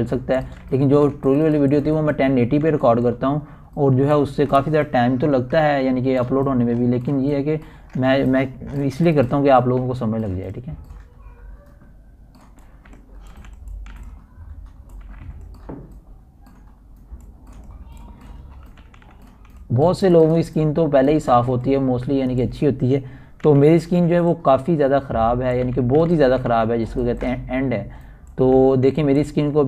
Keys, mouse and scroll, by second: 3.6-5.2 typing, 3.9 click, 5.7-7.1 drag, 7.1 scroll up 1, 8.2-9.4 typing, 8.3 ctrl+alt+scroll down 1, 9.4 ctrl+alt+scroll up 1, 10.7 scroll up 1, 12.1-12.7 typing, 13.2-15.5 drag, 15.5 [, 15.6 click, 16.0 ], 16.2 click, 16.5 ], 16.7 click, 17.7 typing, 18.1-20.8 drag, 20.7-22.2 typing, 20.8 scroll down 1, 22.2-23.9 drag, 23.9 [, 24.3 click, 24.4 [, 25.9-27.0 typing, 26.9 click, 28.2-29.6 typing, 29.5-29.6 drag.